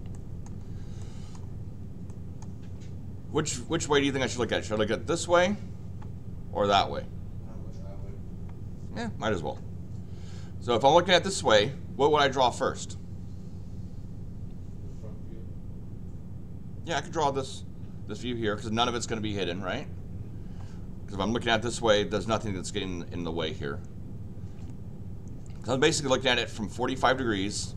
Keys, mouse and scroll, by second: 0.1 middle click, 1.0 middle click, 2.0 middle click.